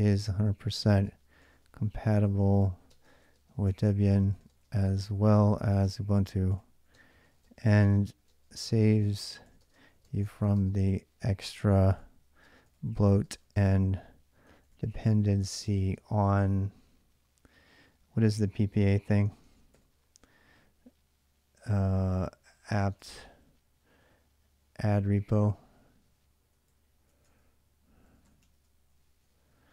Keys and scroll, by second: 0.0-16.2 typing, 19.0-20.0 typing, 21.9-22.8 typing, 26.0 ctrl+a, 26.2-29.7 typing.